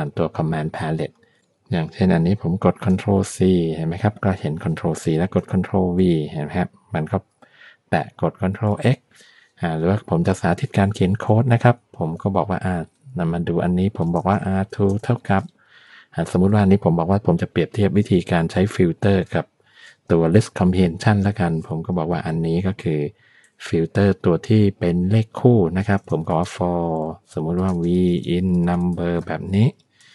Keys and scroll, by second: 2.9 ctrl+c, 5.5 ctrl+v, 8.5 ctrl+x, 11.2 Return, 11.7 Up, 12.1 Tab, 13.9 r, 14.1 2, 14.7 space, 14.7 =, 23.5 [, 26.0-30.1 typing.